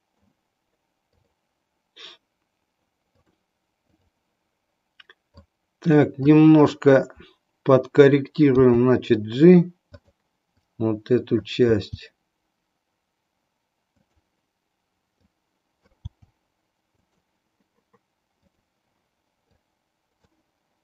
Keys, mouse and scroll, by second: 1.2 click, 3.1-4.1 drag, 5.5 click, 8.6 g, 10.7 click, 11.8 g, 14.1 click, 15.1 click, 16.2 g, 19.5 click.